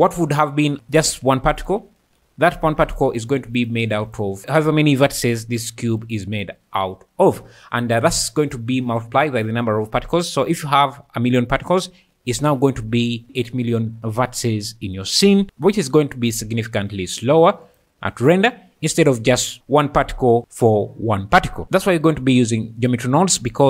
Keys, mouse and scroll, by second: 0.0 space, 2.4 Tab, 3.1 1, 4.4 alt+z, 7.2 Tab, 8.4 click, 13.2 Tab, 13.2 a, 17.6 click.